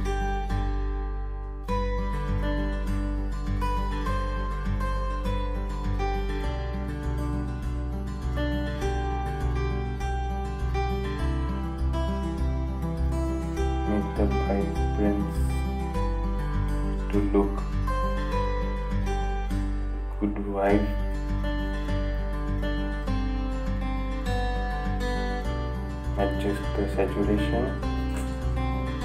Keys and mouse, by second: 16.5-22.8 drag, 22.8 right click, 24.3 click, 27.4-29.0 drag.